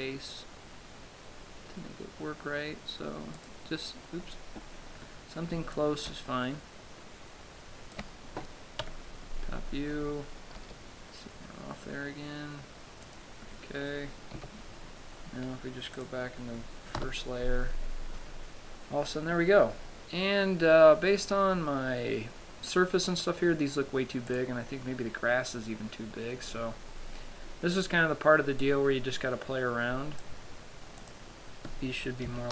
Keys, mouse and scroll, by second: 3.9 click, 4.5-5.0 scroll up 2, 6.1 click, 9.2 KP_7, 11.0 g, 13.5 click, 14.7 Tab, 16.3 click, 17.3 KP_0, 24.7 right click, 26.6-29.1 scroll down 4, 29.1 click, 31.5 click.